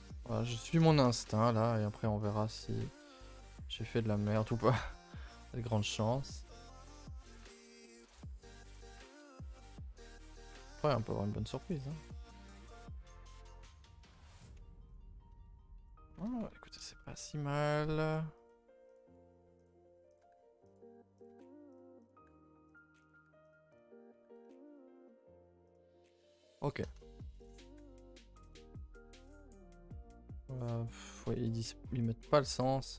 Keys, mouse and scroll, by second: 0.2 click, 0.6 click, 0.9 shift+click, 1.2 g, 2.4 click, 3.0 click, 3.8 g, 4.6 click, 4.7 g, 7.8 click, 8.2 g, 10.1 g, 10.7 click, 10.8 g, 12.6 click, 12.7 g, 14.0 click, 14.1 g, 14.9 z, 17.0 shift+middle click, 17.6 click, 17.7 g, 18.9 click, 19.0 g, 20.2 click, 20.2 g, 21.2 click, 21.3 g, 22.1 click, 22.2 g, 23.1 click, 23.1 g, 23.8 click, 24.1 g, 26.3 click, 26.3 g, 27.0 shift+middle click, 27.5 click, 27.7 g, 29.2 click, 29.4 g, 32.3 g.